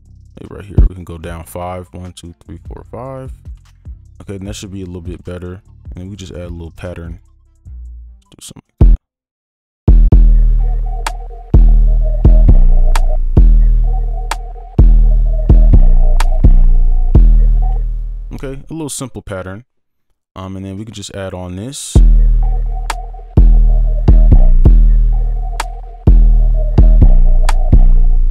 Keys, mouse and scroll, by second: 1.0 right click, 1.3 ctrl+click, 1.8 shift+Down, 2.1-2.6 shift+Down, 3.5 ctrl+a, 3.7 alt+scroll up 1, 4.1 right click, 4.9 ctrl+click, 8.3 right click, 10.1 space, 11.1 right click, 13.1 space, 13.3 space, 14.1 ctrl+click, 16.4 right click, 21.9 space, 24.4 space, 28.0 space.